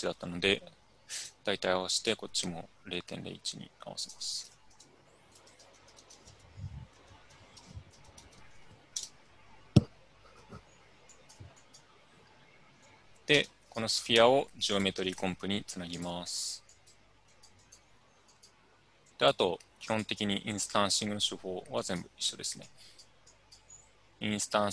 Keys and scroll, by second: 4.8-8.8 typing, 7.6 Tab, 11.0 Return, 13.4 Tab, 14.9-15.7 typing.